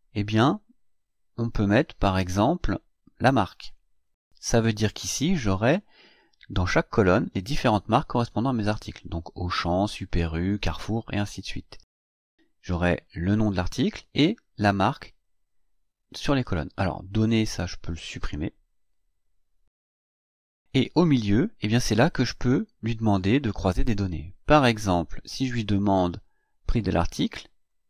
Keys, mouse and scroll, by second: 3.5-4.8 drag, 17.2 click, 19.0 Delete, 26.3-27.8 drag.